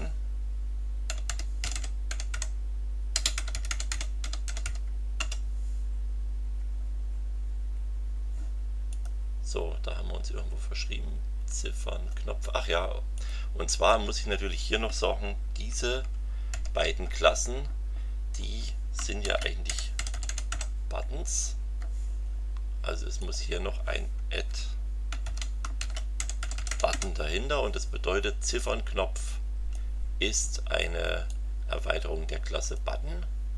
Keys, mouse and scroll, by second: 0.8-5.1 typing, 5.1 Return, 8.9 click, 9.9-10.3 scroll up 2, 13.1 click, 13.9 BackSpace, 16.5 alt+q, 18.9-21.0 typing, 23.2 click, 25.2 alt+q, 25.8 alt+shift+b, 26.2 alt+shift+u, 26.4 alt+shift+t, 26.7 alt+shift+o, 26.9 alt+shift+n, 28.5-29.9 drag, 31.3-32.9 drag.